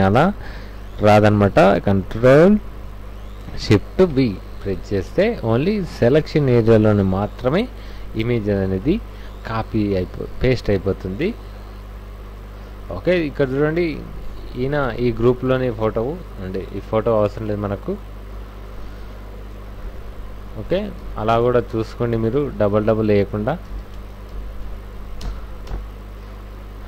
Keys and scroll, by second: 3.9 ctrl+shift+v, 5.1 v, 8.9 alt+Tab, 12.0 Left, 12.6 Right, 14.3 Left, 15.2 Right, 18.5 Right, 21.1 alt+Tab, 23.6 alt+i, 23.7 alt+a, 23.8 alt+s, 23.9 alt+Return, 24.3 alt+i, 24.4 alt+a, 24.7 alt+c, 25.2 alt+Return, 25.6 ctrl+alt+f.